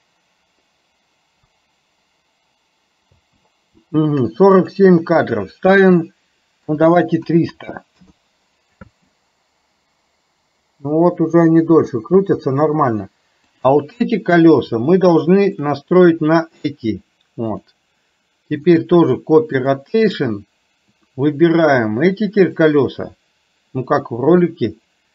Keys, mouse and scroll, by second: 3.2 space, 4.7-8.0 drag, 7.5 KP_0, 8.9 space, 12.3 space, 13.6 click, 15.6 shift+click, 17.5 click, 18.7-19.8 drag.